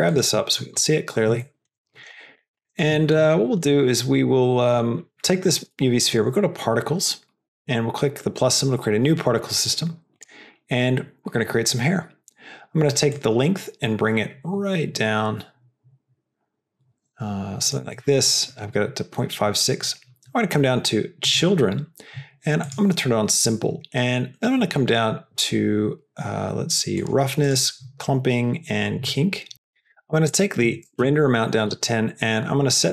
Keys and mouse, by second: 0.3 shift+middle click, 1.3 shift+middle drag, 2.1 middle click, 2.5 middle click, 3.0 shift+middle click, 3.3 middle click, 4.2 middle click, 7.4 click, 10.1 click, 13.1-17.7 drag, 21.2 drag, 22.6 click, 27.0 click, 29.5-31.6 drag.